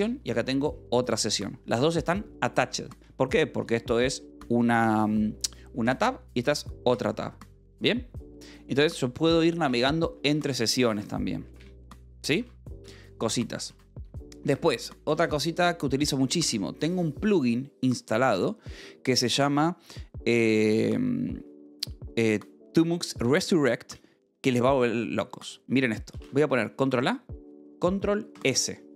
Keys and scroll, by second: 0.3-2.3 typing, 3.5 k, 6.3 j, 8.4 Return, 10.8 ctrl+a, 11.0 s, 11.4 k, 11.6 Return, 12.8 r, 14.2 ctrl+a, 14.5 Escape, 15.6 ctrl+a, 16.4 Escape, 25.5 j, 25.7 k, 26.7 ctrl+a, 28.8 ctrl+s.